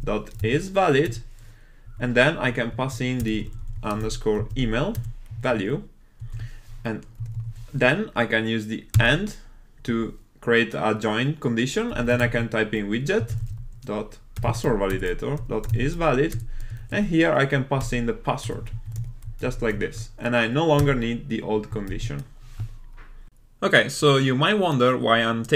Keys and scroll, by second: 9.9 Tab, 15.0 Return, 22.1 super+s.